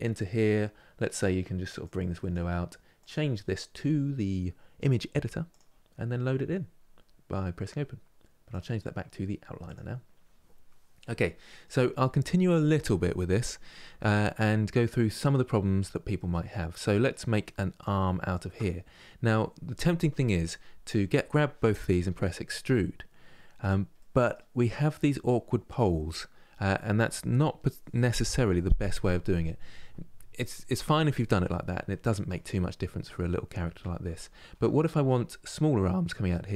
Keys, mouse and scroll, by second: 1.6-5.7 drag, 8.2-10.7 drag, 10.7 middle click, 11.7-13.1 scroll up 2, 13.1-17.5 middle drag, 17.5 click, 18.3-21.4 middle drag, 21.7 e, 23.7-26.7 middle drag, 32.0-33.9 middle drag, 33.9 ctrl+z, 34.5-36.5 middle drag.